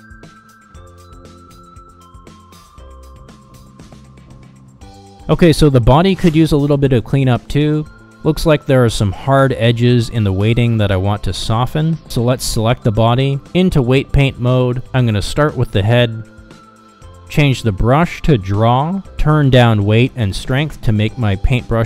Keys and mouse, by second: 0.3 middle click, 0.4 click, 0.6 middle click, 0.8 click, 1.1 middle click, 1.3 click, 1.5 r, 3.0 ctrl+z, 3.7 r, 5.9 ctrl+z, 6.8 t, 7.6 click, 8.1 r, 10.7 ctrl+z, 12.1 ctrl+Tab, 13.1 KP_Divide, 13.9 shift+middle click, 14.8 click, 15.7-16.8 middle drag, 17.3 click, 17.5-18.7 middle drag, 19.6 middle click, 20.9 click.